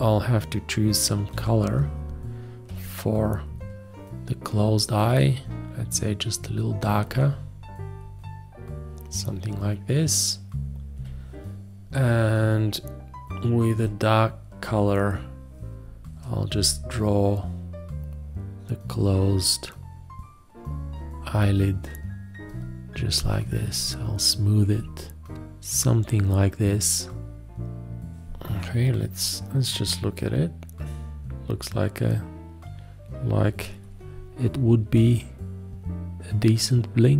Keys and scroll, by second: 1.3 8, 2.7 d, 10.9 b, 13.8 d, 16.5 b.